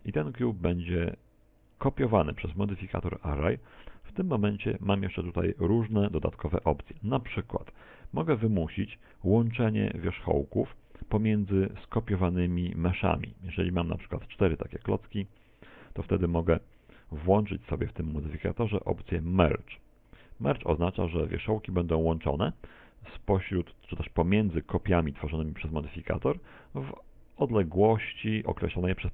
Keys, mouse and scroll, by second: 0.4 click, 3.6-4.7 scroll up 3, 4.1 shift+middle click, 8.1 click, 13.1 click, 14.2 shift+middle click, 14.8 middle click, 15.9 right click, 16.7 h, 17.4 right click, 18.0 middle click, 20.8 click, 25.7 middle click.